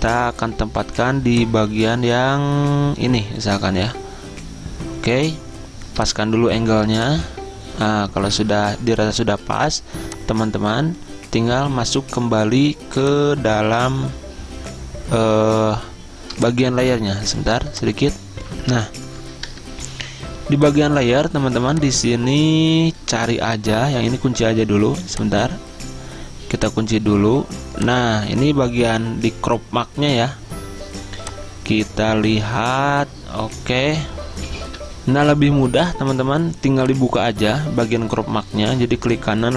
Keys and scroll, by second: 9.4 Return, 19.6 Return, 34.8 F10.